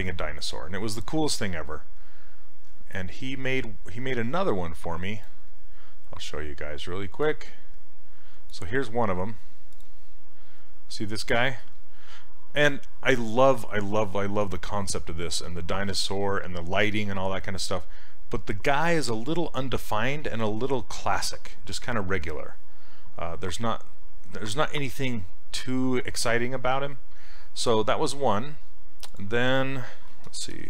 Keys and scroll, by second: 29.9-30.6 typing.